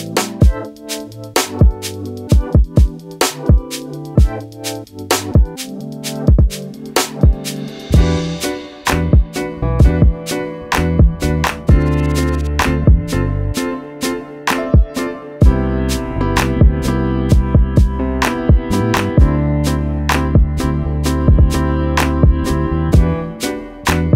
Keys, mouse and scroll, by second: 0.1-0.5 scroll up 2, 0.6-1.1 alt+scroll down 4, 1.5 click, 2.8 scroll up 1, 4.1 click, 6.8 alt+shift+click, 7.0 click, 7.2 alt+scroll down 2, 7.5 click, 8.0 scroll down 1, 9.0 click, 12.1 click, 12.6 scroll down 1, 12.9-14.1 scroll up 3, 14.1 right click, 14.7 click, 19.2 click, 21.2-22.1 scroll down 1, 22.2 click, 22.4 alt+click, 22.9 ctrl+z, 23.7 alt+click.